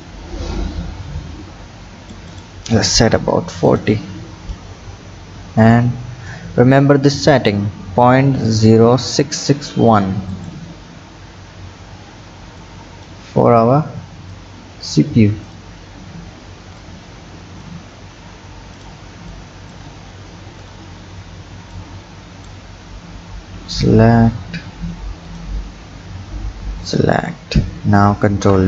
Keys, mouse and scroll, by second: 0.0-3.8 drag, 10.3 click, 10.8-11.5 scroll down 5, 11.5 Tab, 12.6 click, 13.3-14.4 scroll down 4, 14.4 click, 15.5 click, 16.8-18.8 drag, 19.3 click, 19.8 Tab, 20.6 alt+click, 21.7 click, 23.7 alt+shift+click, 25.3 alt+shift+click, 26.8 alt+shift+click, 28.3 ctrl+b.